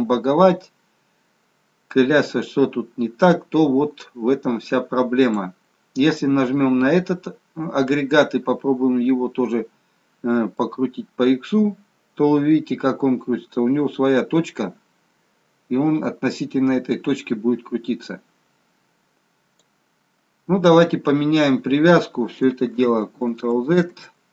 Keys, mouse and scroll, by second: 0.6 click, 6.0 click, 6.8-7.9 scroll up 3, 7.9-9.2 scroll down 2, 10.7 click, 22.7 ctrl+z, 23.4 ctrl+z, 23.9 ctrl+z.